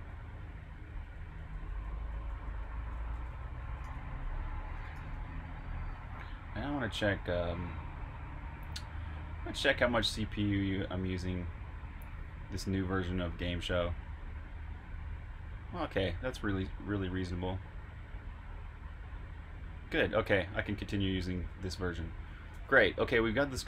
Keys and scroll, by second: 0.0-4.9 typing, 7.1 typing, 21.4 super+q, 22.1 Escape.